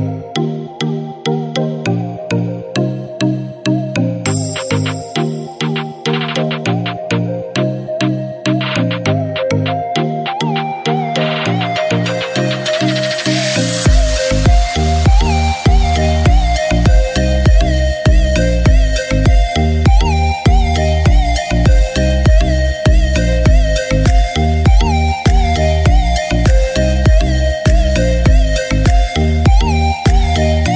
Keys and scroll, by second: 23.0-24.3 typing, 25.3 ctrl+i, 26.0-28.2 typing, 29.9 typing.